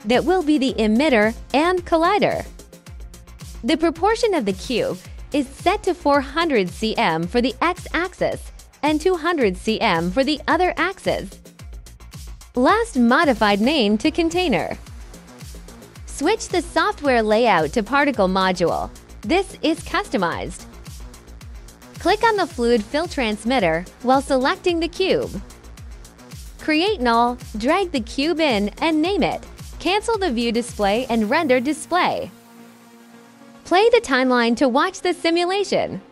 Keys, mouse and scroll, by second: 1.4 KP_4, 2.4 KP_0, 3.0 Return, 4.1-6.0 alt+drag, 6.3-6.8 alt+middle drag, 7.0 alt+click, 7.9 alt+click, 8.1 alt+click, 9.0 Caps_Lock, 9.4-12.7 typing, 9.6 Caps_Lock, 13.4 click, 14.0-14.5 alt+drag, 14.8 alt+middle click, 16.2 alt+click, 17.2 alt+click, 17.8-19.8 alt+drag, 20.1 alt+middle click, 22.3 alt+click, 24.6 alt+click, 26.2 click, 26.8 click, 27.3 click, 28.0 click, 28.5-29.7 typing, 29.7 click, 29.8 ctrl+z, 30.0 click, 31.2 click, 31.4 click, 33.2 click, 33.6 click.